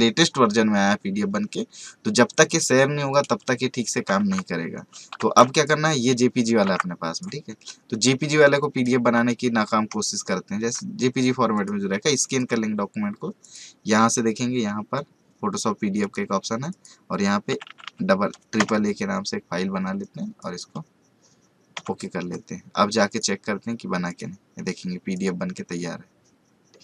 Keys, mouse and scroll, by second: 3.1 click, 4.2 alt+Tab, 5.2 ctrl+z, 5.5 click, 6.6 alt+Tab, 8.6 click, 11.5 click, 16.0 click, 17.5-17.8 typing, 20.4 click, 23.1 click, 26.4 scroll down 1.